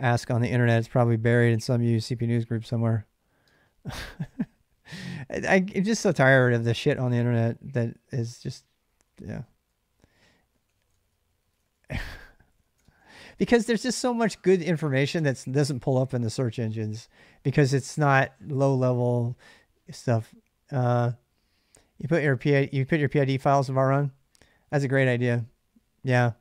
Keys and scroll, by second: 5.4 space, 5.4 q, 5.8 ctrl+[, 5.9 k, 6.3-6.7 l, 8.0-13.7 typing.